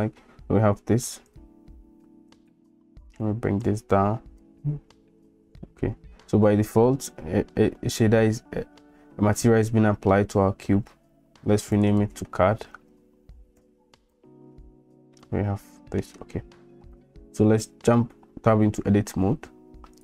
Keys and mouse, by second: 1.3 click, 3.8 click, 5.7 shift+click, 10.1-10.7 middle drag, 11.7 click, 11.9-14.1 drag, 14.1-14.4 right drag, 15.1-16.0 middle drag, 17.8 Tab.